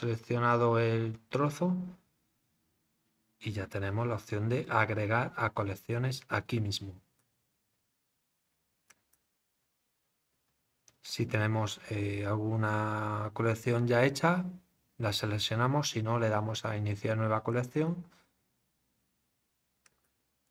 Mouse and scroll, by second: 8.9 click, 17.5 click, 19.8 click.